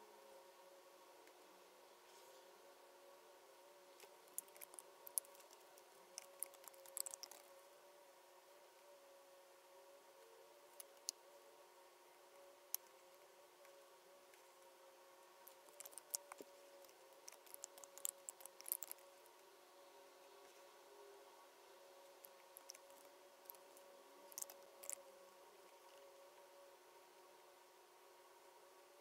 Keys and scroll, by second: 5.0 super+F9, 5.5 Delete, 16.1 super+F9, 16.8 BackSpace, 23.4 super+F9, 24.4 BackSpace.